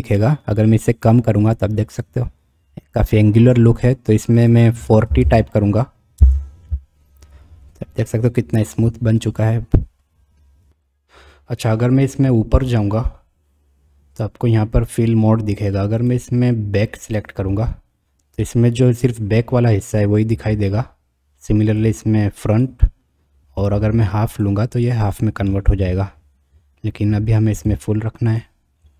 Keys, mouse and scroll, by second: 0.8-4.0 drag, 4.4-7.0 drag, 16.2-17.2 drag, 18.4-19.2 middle drag, 19.2 drag, 21.8-22.7 drag, 23.8-24.5 drag, 25.5-26.1 middle drag, 27.7 click.